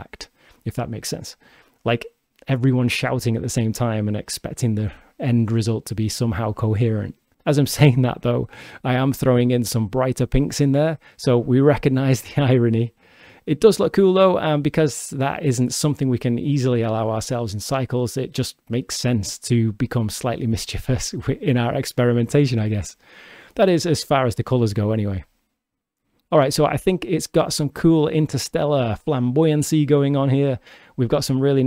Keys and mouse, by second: 3.8-6.1 drag, 7.2-8.3 drag, 7.2 shift+d, 12.0 g, 14.6 click, 15.5 click, 16.8-21.3 drag, 21.9 shift+d, 23.9 click, 24.7 g, 27.4-30.2 shift+drag.